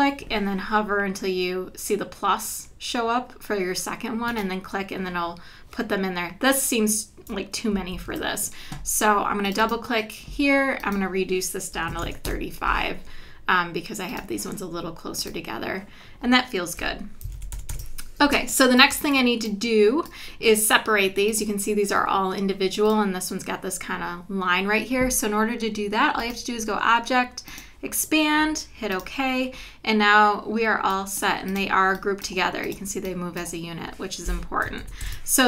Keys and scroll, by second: 7.9 super+z, 11.9 KP_3, 12.3 Return, 16.8 v, 17.3 super+-, 18.3 space, 34.8 super+=.